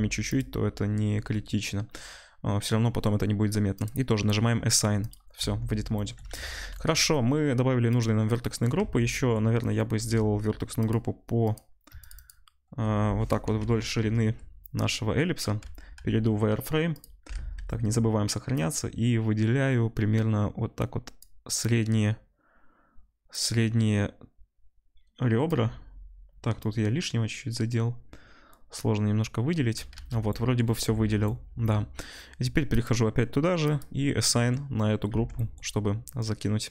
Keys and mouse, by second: 0.8 click, 2.0-3.8 drag, 3.8-8.0 middle drag, 5.4 Tab, 6.4 ctrl+s, 8.0-10.8 drag, 8.7 Tab, 9.9 2, 10.8 middle click, 10.9 click, 11.4 middle click, 11.5 click, 12.1 alt+shift+middle click, 12.2-16.9 alt+shift+drag, 13.4 KP_1, 15.6 z, 16.9 middle click, 17.0-18.6 ctrl+drag, 17.4 ctrl+s, 29.9 z, 31.0 ctrl+s, 35.1 Tab, 35.3-36.7 middle drag.